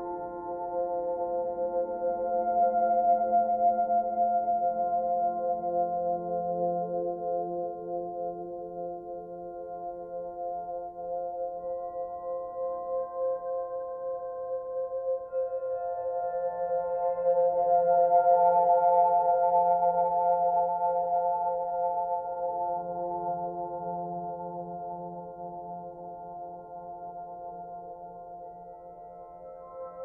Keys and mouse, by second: 0.4-1.1 typing, 1.3 Return, 3.4 ctrl+alt+click, 4.3 typing, 5.0-6.3 ctrl+alt+drag, 7.1-8.2 drag, 8.2-9.8 typing, 8.7 click, 10.2 ctrl+alt+click, 11.2-12.0 typing, 11.3 click, 13.3 g, 13.8 z, 16.3 shift+click, 17.5 g, 17.8 x, 18.8 shift+click, 19.7-20.8 typing, 21.2 shift+middle click, 22.6 ctrl+alt+click, 23.1-23.9 typing, 26.3 Tab, 28.2 click, 29.2 click.